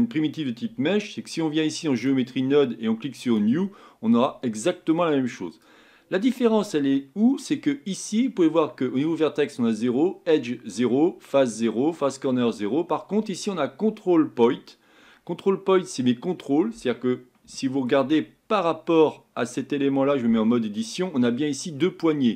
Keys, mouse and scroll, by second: 2.0 click, 3.4-7.5 drag, 7.5-8.7 scroll up 5, 17.5 shift+middle click, 18.2-18.6 scroll up 7, 18.9 scroll down 3, 20.3 Tab, 20.8 middle click, 21.6 scroll down 2, 22.0-22.3 middle drag.